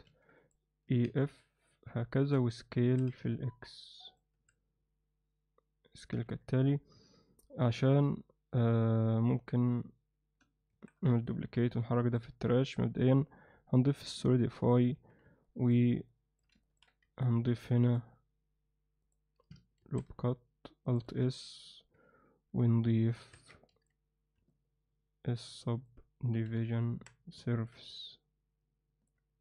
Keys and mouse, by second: 0.3 ctrl+r, 2.8 s, 4.3 s, 6.3 Tab, 7.0 Tab, 7.6 Tab, 10.7 shift+d, 11.5 m, 12.7 click, 14.1-14.7 drag, 14.9 Tab, 15.4 alt+middle click, 16.1 alt+middle click, 16.6 ctrl+alt+middle click, 17.4 ctrl+r, 19.8 alt+s, 23.3 Tab, 23.7 ctrl+2, 24.5-25.9 alt+middle drag, 26.4 KP_3, 26.9 Tab, 27.5 ctrl+alt+middle click, 28.0-29.1 alt+middle drag.